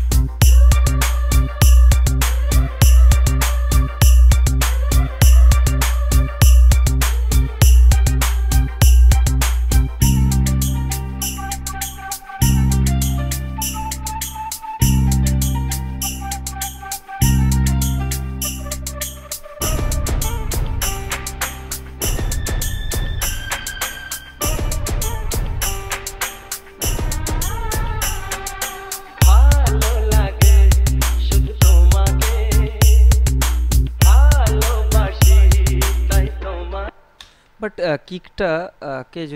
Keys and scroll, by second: 37.1 space.